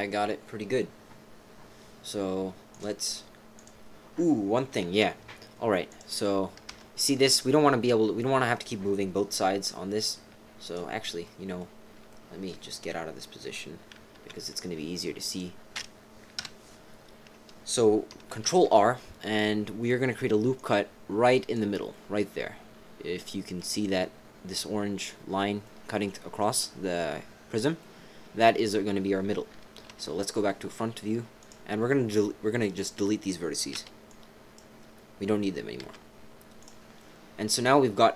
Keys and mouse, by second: 2.7 click, 3.5 click, 4.8 z, 6.7 Tab, 10.6 click, 11.2 click, 12.1 click, 12.3 click, 12.4 middle click, 14.1 z, 16.4 KP_5, 18.4 ctrl+r, 21.9-23.6 drag, 25.6-27.1 middle drag, 27.8 middle click, 29.5 KP_3, 29.9 KP_1, 31.4 click, 32.7 click, 33.7 b, 35.8 x, 37.0-38.1 drag.